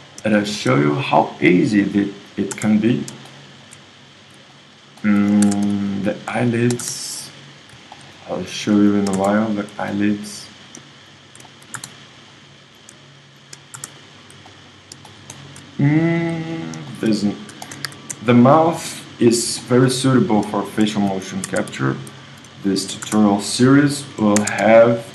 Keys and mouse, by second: 0.4 middle click, 2.2-4.2 drag, 2.5 space, 5.4 ctrl+Tab, 6.8-9.9 drag, 6.8 space, 9.2 space, 11.8 space, 13.7 space, 17.9 KP_1, 19.3-22.2 middle drag, 21.5 ctrl+Tab, 22.8 middle click, 23.0 space, 24.4 ctrl+Tab.